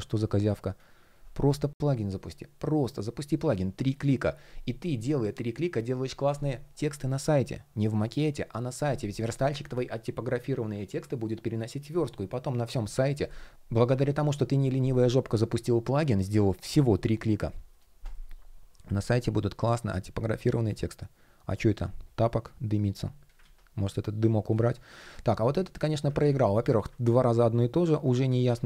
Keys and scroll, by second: 17.3 shift+p, 23.0 super+z, 24.7 shift+p, 25.7 super+z, 27.8 super+z.